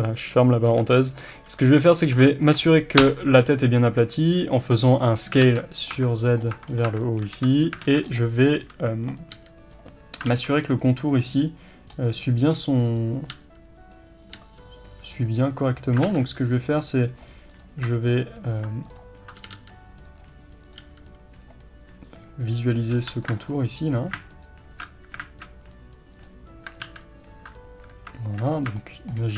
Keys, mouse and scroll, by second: 4.4 scroll down 2, 4.7 middle click, 5.5 alt+z, 5.9 middle click, 6.5 Tab, 6.7 scroll up 1, 6.9 Tab, 7.4 KP_7, 7.9 alt+a, 8.1 scroll up 1, 9.0 click, 9.4 g, 10.3 ctrl+r, 12.4 click, 12.6 g, 13.2 click, 13.4 g, 14.3 click, 14.4 g, 16.1 ctrl+e, 17.1-17.6 drag, 19.5 g, 20.7 click, 20.8 g, 21.5 click, 23.0 3, 23.5 ctrl+alt+click, 26.9 ctrl+z, 28.3 shift+click, 28.5 scroll down 1, 28.8-29.3 shift+middle drag.